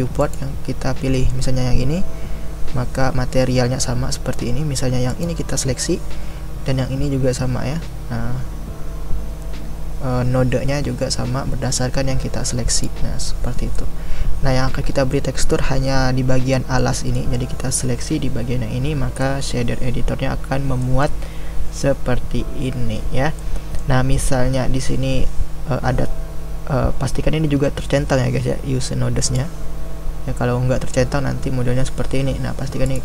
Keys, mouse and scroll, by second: 0.3 click, 1.2-5.2 middle drag, 5.2 click, 12.8 click, 13.7-29.2 middle drag, 29.2-33.0 drag.